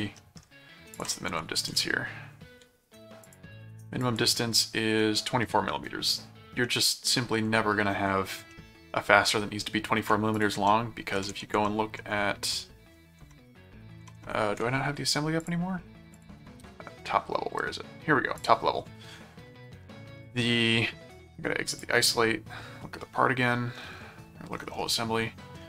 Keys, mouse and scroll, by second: 0.2 ctrl+middle click, 0.9 ctrl+click, 1.3 ctrl+,, 1.7 m, 3.2 click, 4.0 click, 6.6 middle click, 8.5 middle click, 10.3 ctrl+click, 10.5 ctrl+Tab, 11.1 ctrl+Tab, 13.2 ctrl+shift+Tab, 14.0 ctrl+shift+Tab, 15.4 click, 16.2 click, 18.4 click, 21.7 click, 25.0 middle click.